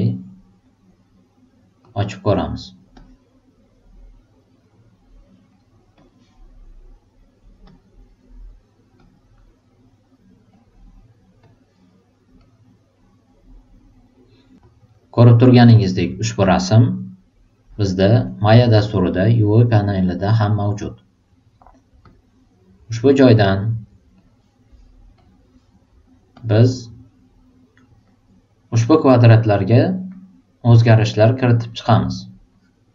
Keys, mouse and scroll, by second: 1.8 super+click, 2.9 super+click, 5.9 super+click, 7.6 super+click, 9.0 super+click, 10.5 super+click, 11.4 super+click, 12.4 super+click, 14.6 super+click, 17.7 super+click, 22.0 super+click, 25.2 super+click, 26.3 super+click, 32.5 super+click.